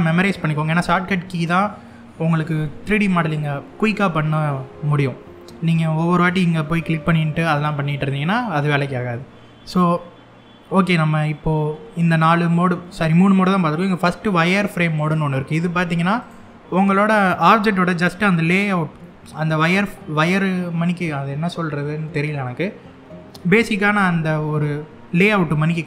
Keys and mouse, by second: 7.9 middle click, 14.7 click, 15.9 click.